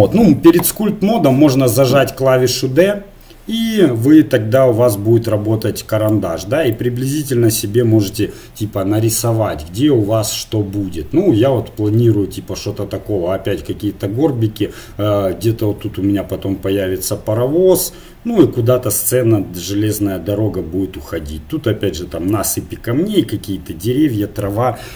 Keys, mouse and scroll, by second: 2.7-8.7 d, 4.7-6.5 drag, 7.1-8.7 drag.